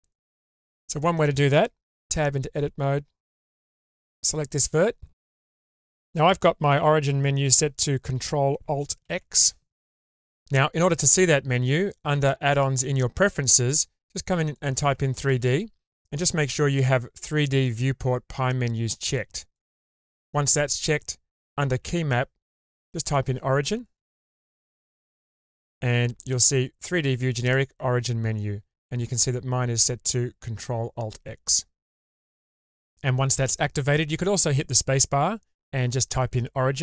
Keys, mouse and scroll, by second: 1.4 1, 2.6 click, 3.0 Tab, 3.3 scroll up 2, 3.9 1, 4.8 click, 9.0 ctrl+alt+x, 26.5 space, 32.9 space.